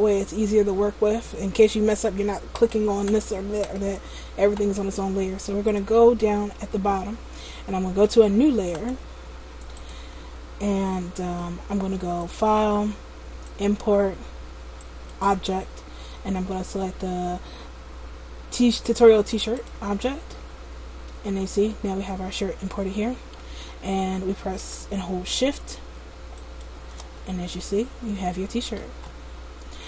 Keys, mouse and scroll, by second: 2.7 right click, 3.2 right click, 3.8 right click, 5.8 click, 8.9 click, 9.9 click, 12.3 click, 20.2 click, 21.8 middle click, 26.5 shift+click, 27.7 middle click, 29.2-29.6 scroll up 3.